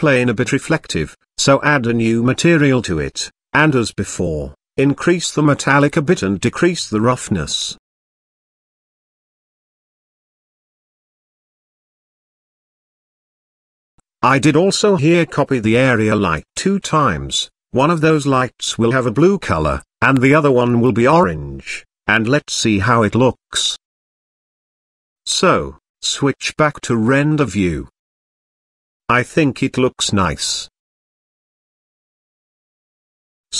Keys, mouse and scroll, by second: 0.9 drag, 2.0-2.5 scroll up 1, 2.5 click, 2.5 scroll up 2, 3.3-3.8 scroll down 3, 4.6-5.2 scroll down 6, 5.3-6.5 scroll down 1, 6.5-8.0 drag, 6.5-8.0 scroll down 2, 8.3-9.1 scroll up 3, 9.1-9.8 scroll up 1, 9.8-10.7 drag, 11.3 click, 12.0 middle drag, 12.4-13.1 scroll down 5, 13.6 click, 14.4 drag, 14.8-15.4 scroll down 2, 15.5 shift+d, 15.7 shift+z, 16.5 click, 17.7 click, 21.3 shift+d, 21.5 shift+z, 23.1 click, 23.7 drag, 26.2 KP_0, 27.1 z, 28.1 KP_0, 28.1 z, 30.6 click.